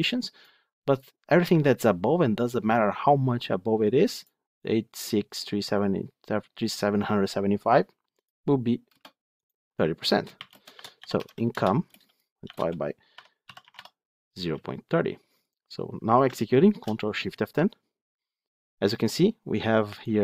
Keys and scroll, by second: 11.4 Return, 16.6 ctrl+shift+F10.